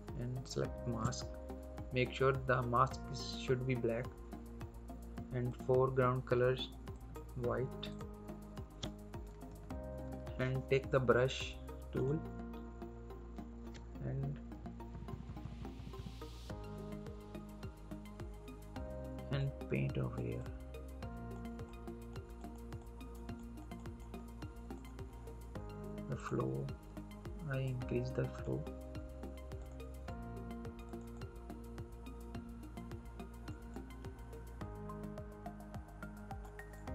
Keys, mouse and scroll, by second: 0.3 alt+click, 5.4 click, 9.5 ctrl+=, 10.1 scroll up 1, 11.9 click, 13.0 scroll up 1, 14.4-15.8 typing, 16.4-16.8 scroll down 1, 16.8-18.6 scroll up 1, 19.3 click.